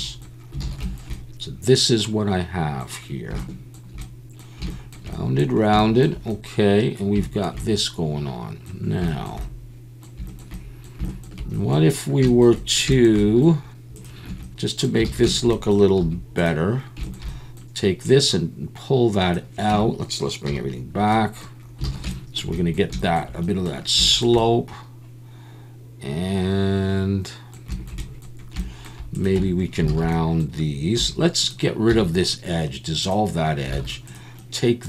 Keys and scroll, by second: 0.6 alt+a, 14.3 Tab, 15.0 alt+a, 16.0 2, 19.7 Tab, 20.5 /, 21.9 alt+a, 29.4 Tab, 29.9 alt+a, 31.0 2, 31.9 x, 33.7 alt+a.